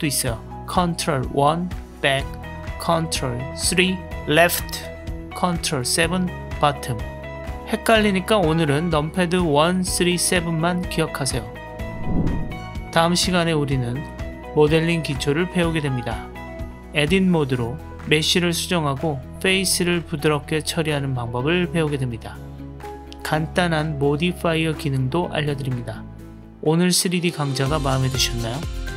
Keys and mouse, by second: 0.5 ctrl+KP_1, 0.7 ctrl+KP_1, 3.4 ctrl+KP_3, 6.0 ctrl+KP_7, 7.6-8.8 drag, 9.6 KP_1, 10.0 KP_3, 10.7 KP_7, 11.0-12.0 drag, 13.9 middle click, 15.0-16.5 drag, 16.7 middle click, 17.7 click, 18.4 click, 18.7-20.4 middle drag, 22.8-24.4 middle drag, 25.1-26.5 middle drag, 26.6 Tab, 27.5-28.5 middle drag, 28.8 Tab.